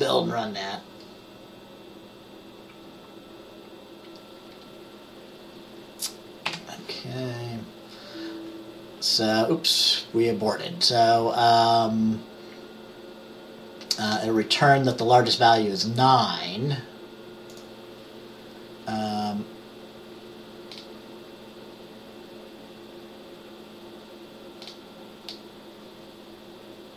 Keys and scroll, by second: 6.6 F5.